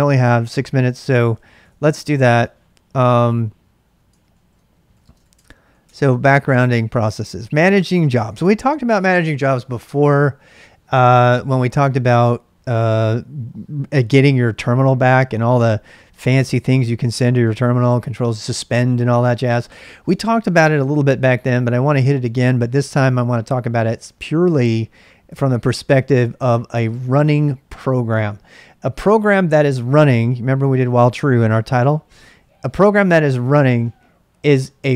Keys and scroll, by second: 1.1-2.2 typing, 2.5 ctrl+a, 2.7 ctrl+a, 4.3 ctrl+a, 4.6-5.7 typing, 5.8 Return, 6.9-9.6 typing.